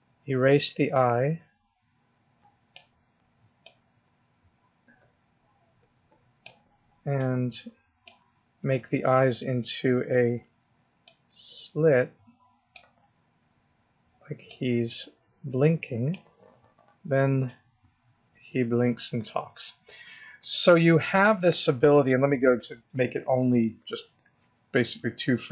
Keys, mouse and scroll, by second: 3.5 ctrl+click, 7.0 ctrl+click, 14.3 click, 17.3 click, 22.4 click.